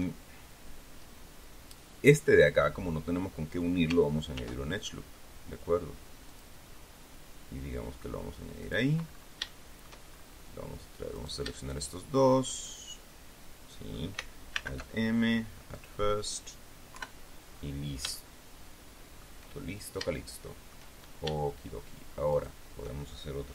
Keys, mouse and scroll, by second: 4.2 ctrl+r, 6.2 click, 8.5 click, 8.9-9.3 scroll up 3, 9.3 shift+middle click, 10.0 shift+scroll up 2, 11.0 shift+right click, 11.4 shift+right click, 12.5-14.0 drag, 14.4 alt+m, 15.6 click, 16.8 KP_3, 17.3-17.7 scroll down 2, 18.0-19.3 shift+middle drag, 20.0 shift+middle click, 22.2 shift+right click.